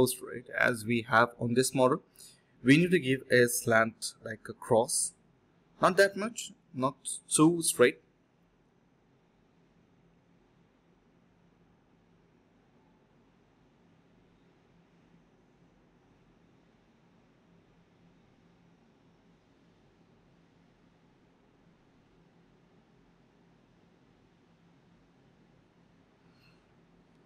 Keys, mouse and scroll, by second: 0.5 f, 2.1 alt+click, 2.7 alt+click, 2.9 alt+click, 3.0 alt+click, 3.5 alt+click, 4.3 alt+click, 7.3 typing, 10.6 alt+click, 12.3 alt+click, 12.9 ctrl+z, 13.2 alt+click, 13.8 alt+click, 16.5 ctrl+z, 17.9 alt+click, 18.1 alt+click, 19.9 alt+click, 20.3 alt+click, 20.4 alt+click, 20.6 shift+click, 21.3 alt+click, 22.1 alt+click, 22.3 alt+click, 23.1 d, 24.4 ctrl+b, 24.8-25.6 typing, 26.3 double click, 26.6 ctrl+z, 26.7 ctrl+z.